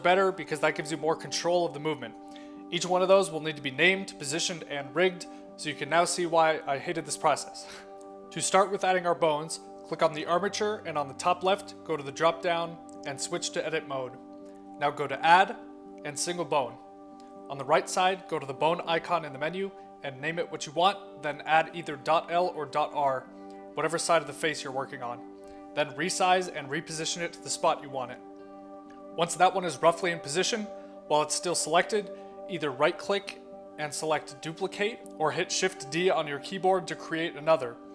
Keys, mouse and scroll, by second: 0.3-1.0 middle drag, 3.5-3.9 middle drag, 7.5-7.9 middle drag, 8.7 click, 9.7 click, 11.8 click, 14.1 click, 15.3 middle click, 16.2 click, 17.6 click, 18.3-18.8 scroll up 4, 18.8 click, 19.0 click, 22.1 click, 22.4 click, 24.9-26.0 typing, 26.3 click, 27.6 click, 27.7 click, 27.9 click, 28.4 click, 28.7 click, 28.9 click, 29.2 click, 29.3 click, 30.3 click, 30.8 click, 31.1 click, 31.5 click, 31.7 click, 34.0 right click.